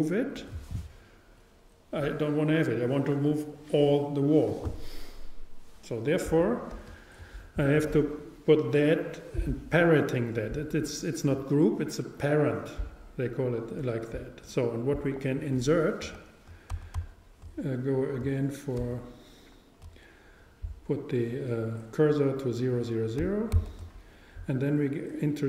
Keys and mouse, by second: 6.9 super+z, 18.8 shift+c, 23.6 shift+a.